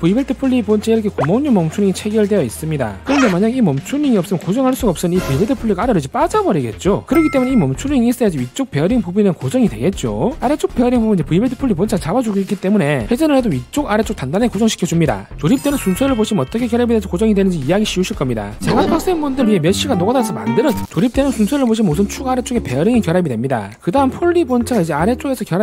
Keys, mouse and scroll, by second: 1.8-3.0 drag, 4.0 right click, 4.6 v, 5.3 click, 6.0 click, 12.1 click, 12.8 click, 14.3 click.